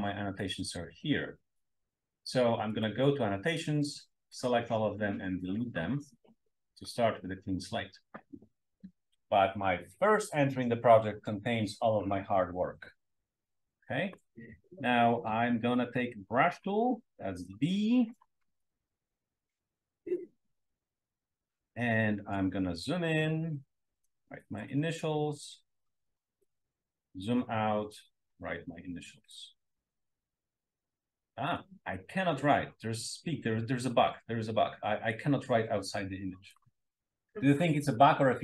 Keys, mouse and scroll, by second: 2.7 click, 4.2 click, 5.6 click, 6.7 click, 8.0 drag, 16.2 click, 18.7 drag, 18.7 s, 18.9 drag, 22.5-23.0 scroll up 2, 23.7-24.8 drag, 24.9-26.5 drag, 27.0-27.8 scroll down 2, 28.4-29.5 drag, 29.6-36.7 drag.